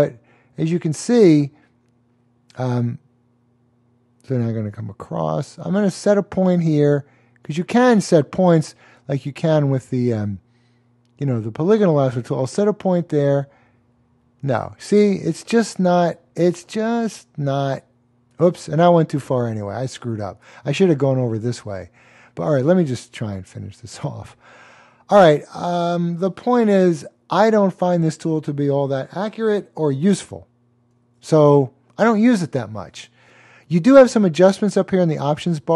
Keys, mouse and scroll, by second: 7.3 click, 11.9 click, 23.3 click, 23.5 double click, 30.9 super+d.